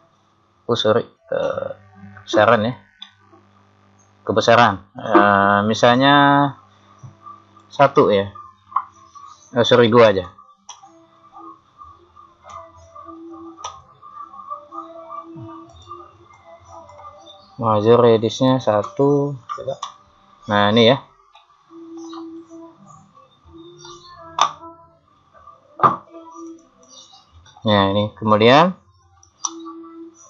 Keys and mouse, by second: 3.1 click, 3.3-4.8 middle drag, 6.0 click, 12.5 KP_1, 13.7 Return, 22.4 KP_3, 24.9 click, 26.5 click.